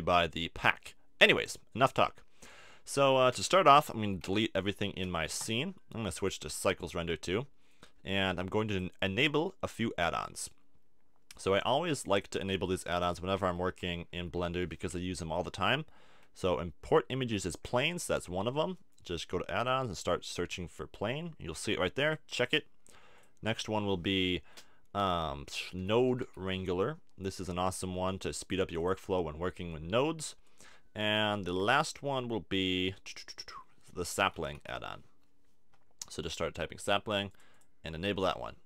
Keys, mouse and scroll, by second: 4.0 a, 4.3 a, 5.0 x, 6.2-8.1 drag, 8.7-10.6 drag.